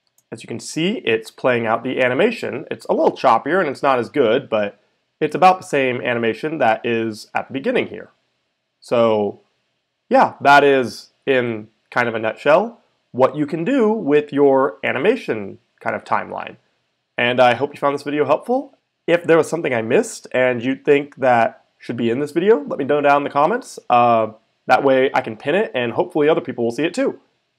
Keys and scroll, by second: 0.0 space.